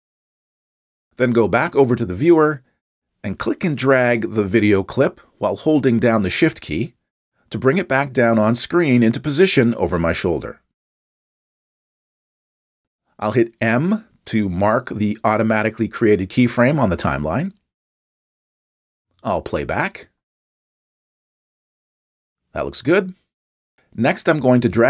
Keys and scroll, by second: 16.9 m.